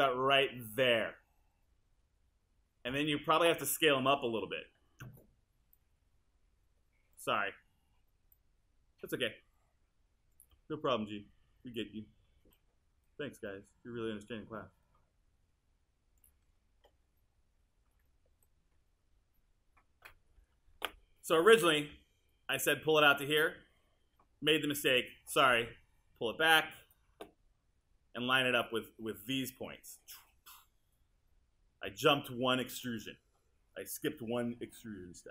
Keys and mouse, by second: 4.7 r, 21.9 w.